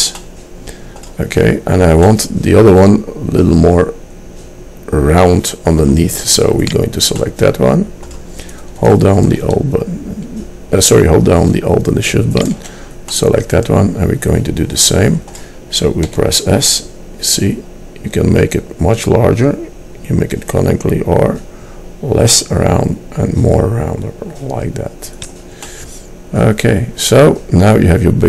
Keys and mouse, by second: 0.3 middle click, 3.4 middle click, 4.5-6.8 middle drag, 7.4 middle click, 12.5-13.9 drag, 16.2 s, 25.7 middle click, 26.5 middle click.